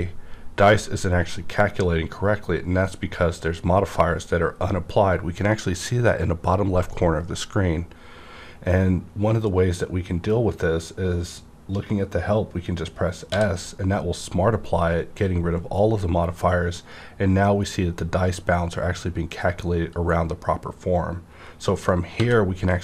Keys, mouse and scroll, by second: 13.3 s, 13.3 scroll up 1, 17.2-17.7 scroll down 1, 17.7-19.5 scroll up 1, 19.5 scroll up 1, 19.7-21.8 scroll down 1, 21.8 scroll down 1, 22.2 b.